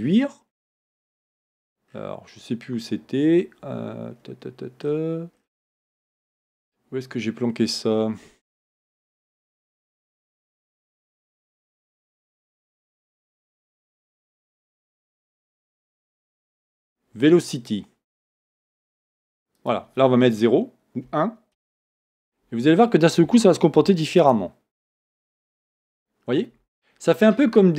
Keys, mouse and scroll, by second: 4.2 scroll down 1, 11.2-11.7 scroll up 1, 18.7-26.5 drag, 21.8 Return.